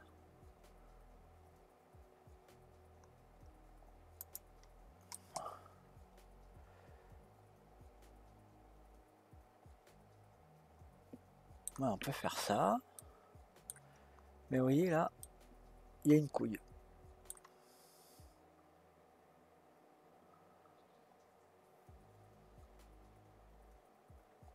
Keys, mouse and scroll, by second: 5.1-8.3 middle drag, 13.0-14.0 middle drag, 14.0-14.5 scroll up 3, 14.6-15.2 scroll down 1, 15.2-18.2 middle drag.